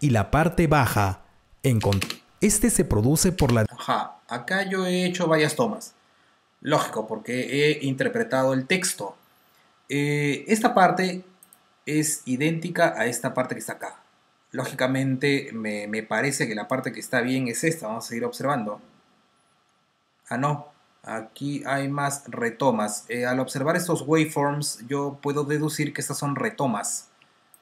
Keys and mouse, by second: 3.9 space, 11.3 click, 16.6 click, 18.0 r, 20.5 t, 27.4 click.